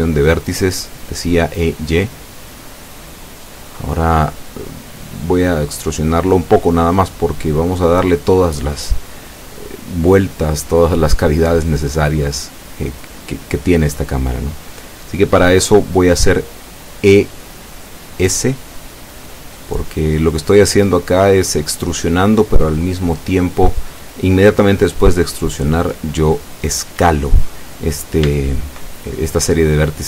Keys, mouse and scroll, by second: 6.4 click, 8.8 e, 9.8 y, 16.7 click, 17.3-17.7 scroll up 2, 17.9 shift+middle click, 19.0 shift+scroll up 3, 25.6 e, 25.8 s, 29.4 click.